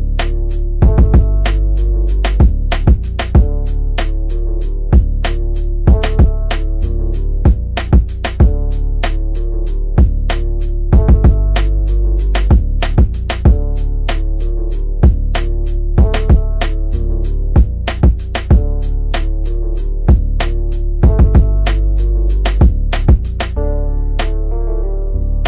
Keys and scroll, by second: 12.6 Escape, 17.4 F3, 22.2 shift+F2, 22.5 Escape, 24.5 shift+F2, 24.8 Escape.